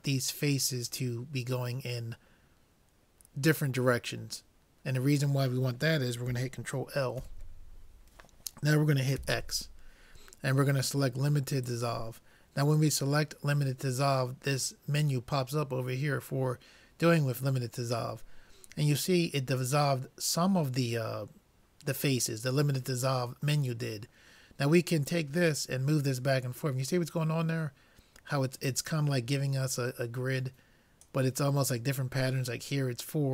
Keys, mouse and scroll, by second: 1.2-3.0 middle drag, 3.2 middle click, 7.2 ctrl+l, 9.2 x, 25.0-26.8 drag.